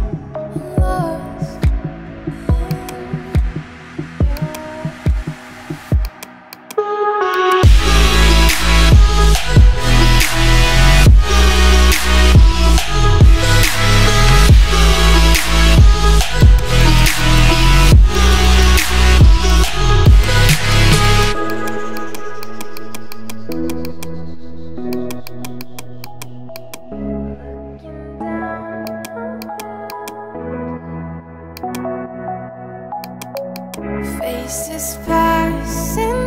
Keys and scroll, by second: 6.3 space.